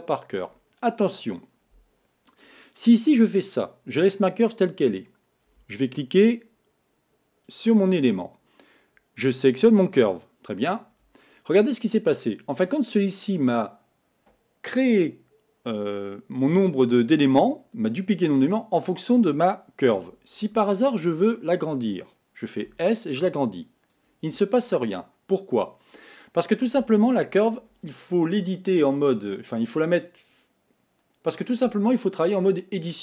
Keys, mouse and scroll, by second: 7.5 click, 9.2-12.2 drag, 21.0 click, 22.9 s.